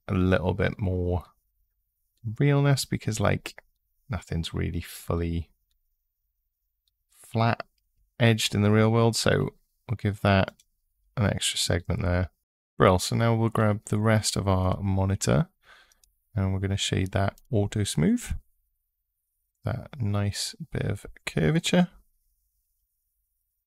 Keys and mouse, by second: 10.2 click, 11.7 Tab, 15.7-17.2 drag, 17.9 click, 20.4 middle click.